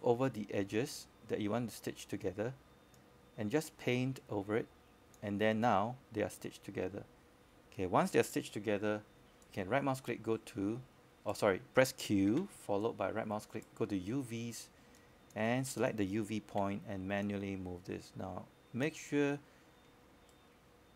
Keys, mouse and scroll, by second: 2.3 scroll down 1, 2.4-8.3 scroll up 1, 8.3-8.9 scroll down 1, 8.9-12.4 scroll up 1, 12.4-13.0 scroll down 1, 13.8-17.3 scroll up 1, 17.3-20.9 drag.